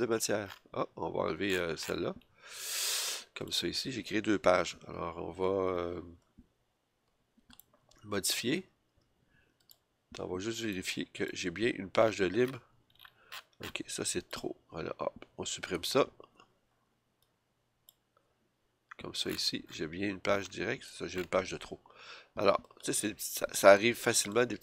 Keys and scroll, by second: 15.7 BackSpace, 18.1 BackSpace.